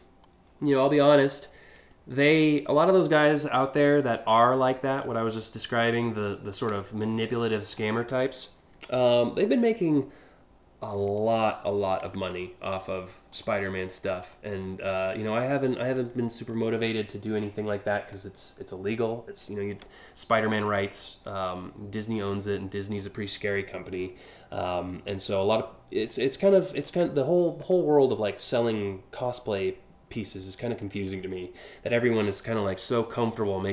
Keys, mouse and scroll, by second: 0.9-2.6 ctrl+drag, 3.9 ctrl+click, 5.6 ctrl+click, 6.7 scroll up 1, 7.4 alt+scroll down 1, 8.0 scroll up 1, 8.6-9.1 ctrl+scroll down 2, 10.7 alt+click, 11.9 ctrl+z, 12.9 ctrl+click, 13.4 ctrl+click, 13.8 ctrl+click, 14.5 ctrl+click, 15.5 alt+click, 17.7-20.1 drag, 20.6-21.8 ctrl+drag, 22.6 ctrl+click, 23.8 alt+click, 25.7 alt+click, 27.0 ctrl+z, 28.4-29.7 drag, 30.4-32.9 ctrl+drag.